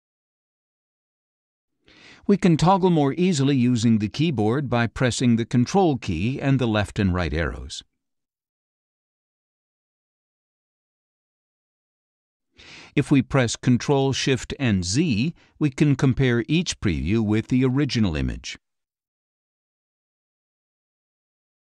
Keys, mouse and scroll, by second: 0.2 click, 1.3 click, 7.5 ctrl+Left, 8.2 ctrl+Right, 9.0 ctrl+Left, 9.9 ctrl+Right, 10.8 ctrl+Left, 11.8 ctrl+Right, 14.4 ctrl+shift+z, 15.4 ctrl+shift+z, 16.4 ctrl+shift+z, 17.4 ctrl+shift+z, 18.4 ctrl+shift+z, 20.6 ctrl+Right.